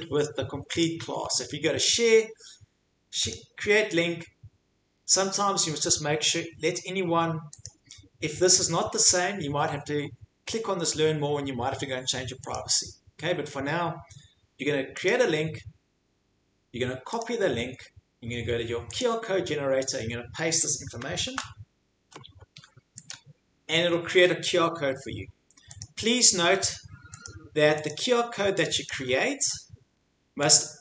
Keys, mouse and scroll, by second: 0.8 click, 3.3 click, 7.6 right click, 12.5 click, 15.1 click, 17.2 click, 19.0 click, 21.3 ctrl+v, 23.1 click, 25.8 click, 27.2 click, 27.9 click, 28.9 click, 30.5 click.